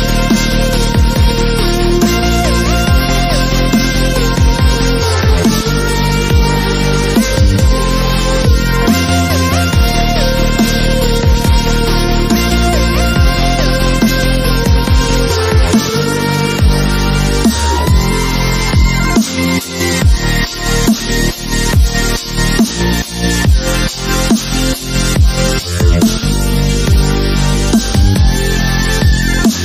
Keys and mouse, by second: 0.3 click, 1.1 click, 1.6 ctrl+l, 1.9 s, 2.2 click, 2.8 z, 3.1 ctrl+r, 4.3-5.6 typing, 4.5 ctrl+Tab, 6.2 click, 6.9 b, 7.1 s, 8.3 s, 8.9 ctrl+r, 9.3 a, 9.5 b, 9.8 b, 10.1 click, 10.9 click, 11.0 b, 11.4 b, 11.9 s, 13.3 click, 13.6-15.3 typing, 15.7 click, 16.1 click, 16.5 s, 17.5 a, 17.6 b, 17.8-19.6 drag, 19.1 s, 20.0 z, 20.1-21.7 drag, 21.7 z, 21.9 click, 22.5 s, 23.1 a, 23.3 z, 24.1 middle click, 24.6 ctrl+l, 26.0 ctrl+z, 27.0 ctrl+z, 28.0 a, 29.0-29.6 typing.